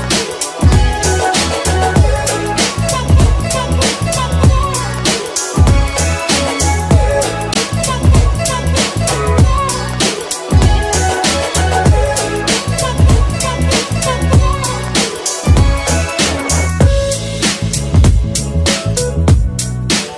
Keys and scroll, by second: 3.1 p.